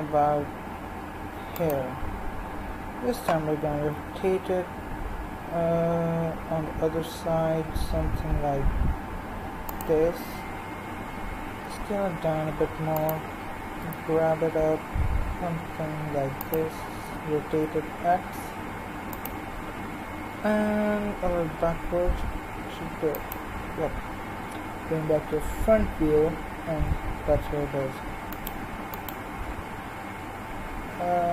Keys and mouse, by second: 3.4 r, 11.7 s, 13.6 g, 17.0 r, 20.2 g, 25.3 KP_1, 25.9-28.3 middle drag, 28.3 click.